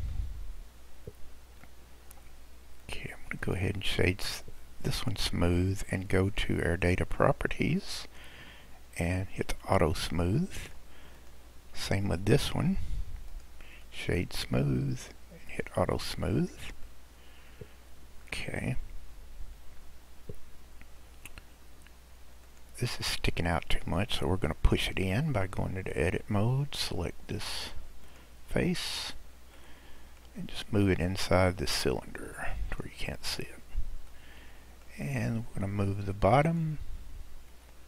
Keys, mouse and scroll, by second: 1.0-1.6 scroll up 6, 1.6-2.8 middle drag, 2.8 click, 3.4 right click, 8.0 click, 9.6 click, 10.3-11.2 middle drag, 11.2 click, 13.3-15.5 right drag, 15.5 click, 16.4-16.8 scroll down 1, 16.8-18.7 middle drag, 18.7-19.5 scroll down 2, 19.5-22.5 scroll up 4, 22.5 click, 23.1-24.1 middle drag, 24.1-25.2 scroll up 2, 25.2 Tab, 27.4 click, 28.0 click, 29.0 click, 29.6-31.3 middle drag, 31.3 click, 33.2-34.2 scroll down 2, 34.2-35.1 middle drag, 35.1-36.4 scroll up 2, 36.4 click, 37.5 Tab.